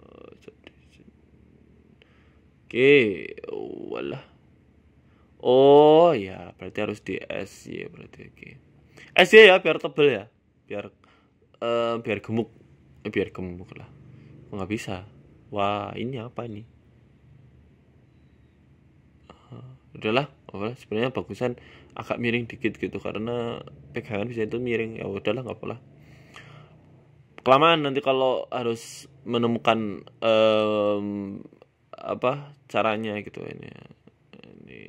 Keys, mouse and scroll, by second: 0.2 ctrl+a, 1.6 middle click, 2.4 ctrl+a, 7.0 middle click, 7.6 middle click, 7.8 Tab, 8.1 middle click, 9.9 click, 10.3 middle click, 10.9 Tab, 11.2 ctrl+a, 12.7 KP_1, 13.7 r, 15.1 r, 15.6 Tab, 16.0 Tab, 16.3 middle click, 16.6-17.1 scroll down 4, 17.1 KP_3, 17.7 KP_1, 18.5 Tab, 19.1 g, 20.4 Tab, 21.1 r, 22.9 r, 23.8 middle click, 24.1-24.5 scroll down 3, 24.4 Tab, 24.5 middle click, 25.0 middle click, 25.5 shift+middle click, 25.6 shift+middle click, 25.8 scroll down 1, 26.2 right click, 26.2 scroll up 1, 26.6 KP_1, 28.1 shift+middle click, 28.8 g, 29.6 s, 30.3 scroll down 2, 30.5 shift+middle click, 30.8 s, 31.4 scroll up 3, 31.8 g, 33.3 middle click, 33.3-33.8 scroll down 5, 33.8 middle click.